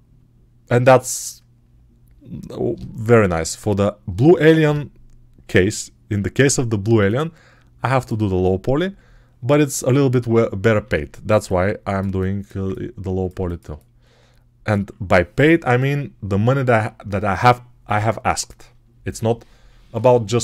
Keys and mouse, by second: 11.2-20.4 ctrl+alt+middle drag.